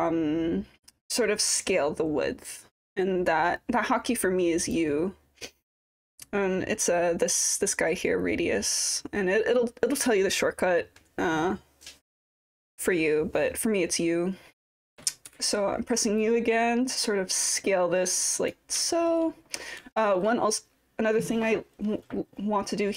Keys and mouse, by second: 16.2-18.6 drag, 18.9 alt+click, 19.9 alt+middle click.